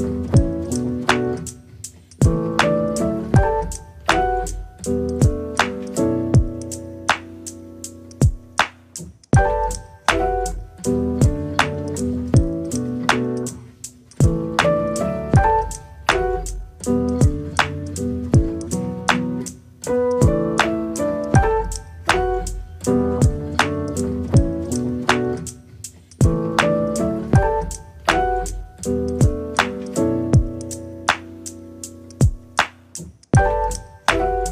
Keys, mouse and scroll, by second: 1.8-2.9 middle drag, 2.9 click, 3.1 middle click, 3.5 scroll up 2, 3.8 middle click, 4.3-5.0 scroll down 2, 5.0 ctrl+z, 6.4 r, 8.0 middle click, 8.2 click, 8.4-9.6 middle drag, 10.3 ctrl+click, 10.8 click, 11.2 click, 11.8 right click, 12.7 a, 12.9 r, 15.0 r, 16.7 g, 18.4 s, 21.0 s, 21.8 g, 24.7 s, 25.3 s, 26.4 g, 27.9 s, 29.1 g, 31.5 middle click, 32.0 click, 32.3-34.5 middle drag.